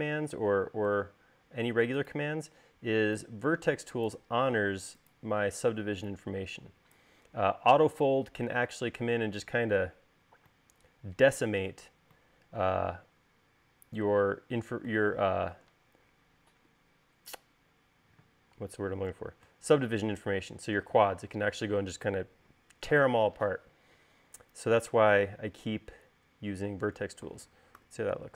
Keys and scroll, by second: 19.3 space.